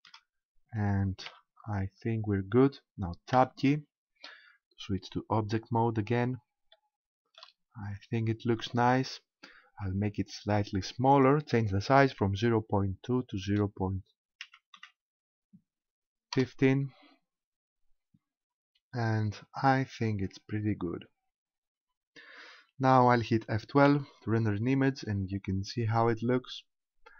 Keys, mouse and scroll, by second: 1.3 4, 3.4 Tab, 5.3-6.7 scroll down 5, 6.7 shift+middle click, 7.7-8.3 scroll up 2, 11.1 click, 17.7-20.2 scroll up 5, 20.2-23.3 scroll down 10, 23.3 scroll down 1.